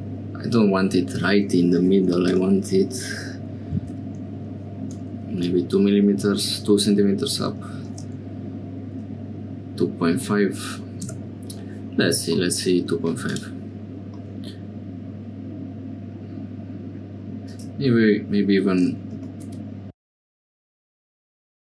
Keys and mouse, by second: 2.1 g, 12.3 middle click, 13.2 click, 14.2-16.9 middle drag, 17.4 click, 19.1 g.